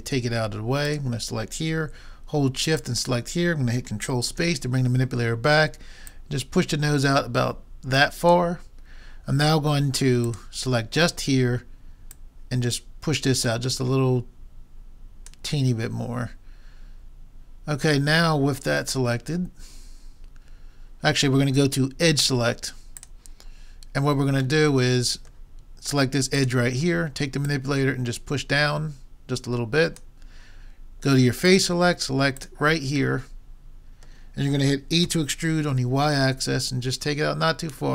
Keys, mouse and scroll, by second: 0.8-2.7 drag, 2.8-4.4 drag, 4.4 ctrl+space, 6.1-7.3 drag, 7.5 click, 10.2-12.0 drag, 12.1-14.0 drag, 18.0-20.0 middle drag, 23.0 click, 23.8-25.0 middle drag, 26.4-29.2 drag, 31.5-34.2 drag, 35.1 e.